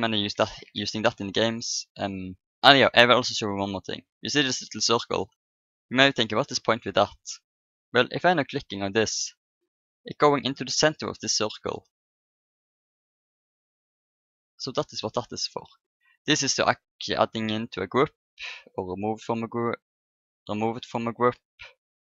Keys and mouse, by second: 0.3 Delete, 4.5-6.2 drag, 5.7-8.9 middle drag, 8.9 click, 9.4 click, 10.0-11.5 middle drag, 11.5 click, 13.3 click, 14.6-16.4 drag, 16.5-18.4 drag, 18.9-22.0 drag.